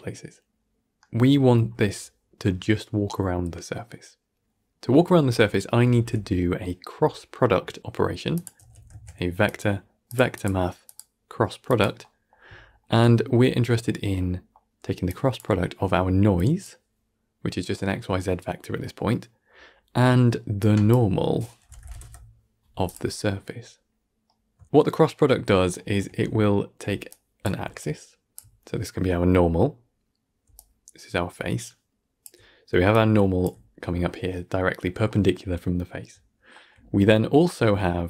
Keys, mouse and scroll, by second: 0.5-8.7 middle drag, 8.7 x, 8.8 shift+a, 10.7-11.9 drag, 11.9-14.2 middle drag, 14.2 scroll down 5, 14.4 middle click, 15.0 click, 15.3-16.5 middle drag, 16.5 click, 18.1-18.7 middle drag, 18.7 scroll up 1, 19.4-20.5 middle drag, 20.5 drag, 23.8-26.7 shift+middle drag, 26.7 d, 27.0 click, 27.3 d, 27.5 d, 27.7 click, 28.2 d, 30.3 d, 30.5-32.1 drag, 32.1-32.6 d, 32.8 click, 33.3 d, 36.4 shift+middle click, 36.7 scroll down 3, 36.9-37.4 shift+middle drag, 37.4 scroll down 1, 37.7-38.0 middle drag.